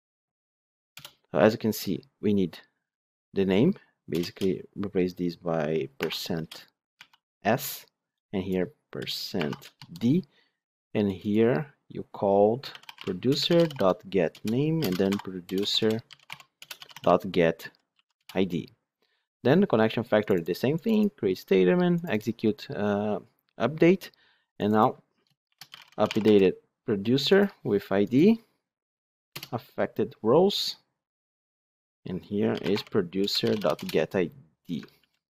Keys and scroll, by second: 13.2 Return, 33.2 Return, 34.9 ctrl+shift+Left.